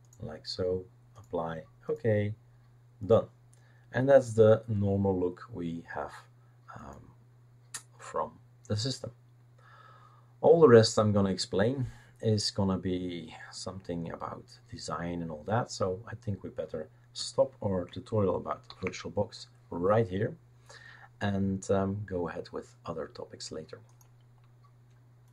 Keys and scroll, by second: 18.7 ctrl+f.